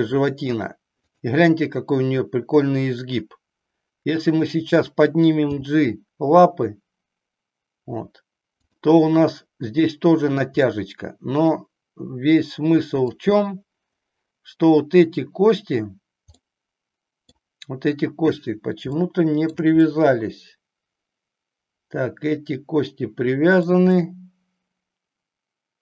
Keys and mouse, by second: 1.2 click, 4.6 click, 5.4 g, 10.7-13.2 middle drag, 16.4-17.4 middle drag, 18.9 shift+middle click, 19.9-23.7 middle drag, 23.9-25.8 middle drag.